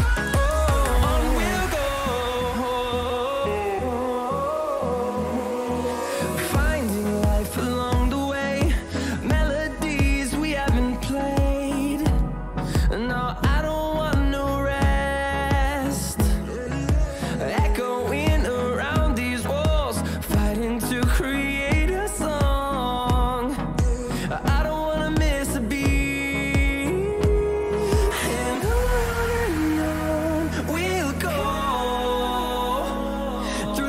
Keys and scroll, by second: 1.2 ctrl+-, 1.8 ctrl+-, 2.6 ctrl+-, 5.1 ctrl+=, 8.8 [, 20.8 ctrl+-, 21.4 ctrl+-, 22.6 ctrl+=, 23.1 ctrl+=, 23.7 ctrl+=.